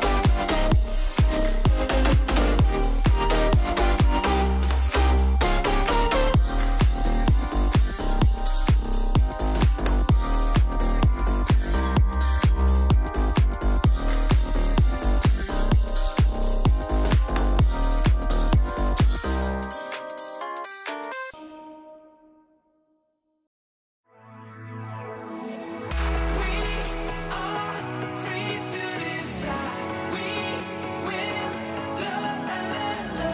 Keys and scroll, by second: 0.7 super+k, 2.1 super+-, 3.6 alt+shift+Down, 6.7 shift+super+2, 13.1 Escape, 13.6 super+g, 13.8 super+r, 23.7 alt+Down, 24.2 alt+Down, 24.6 alt+Down, 25.0 alt+Down, 25.5 alt+Down, 30.2 alt+shift+Right, 30.6 alt+Left, 30.8 alt+Left.